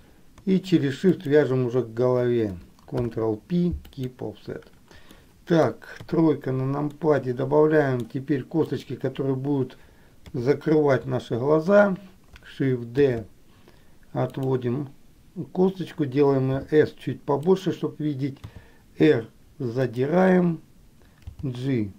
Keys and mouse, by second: 1.3 shift+click, 3.0 ctrl+p, 5.3 middle click, 6.2 KP_3, 7.2 middle click, 10.4 KP_3, 13.3 shift+d.